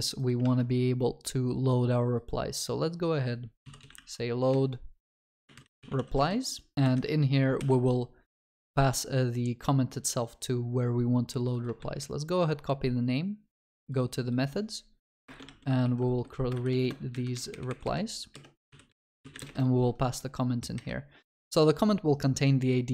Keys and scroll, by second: 7.6 Escape, 11.9 ctrl+c, 16.6 ctrl+v.